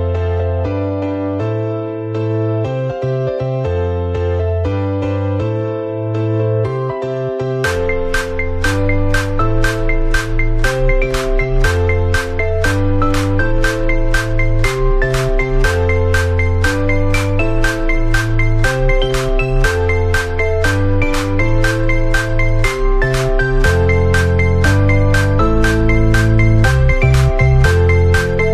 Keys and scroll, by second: 6.1 ctrl+=, 8.4 ctrl+z, 25.1 ctrl+z, 28.4 ctrl+z.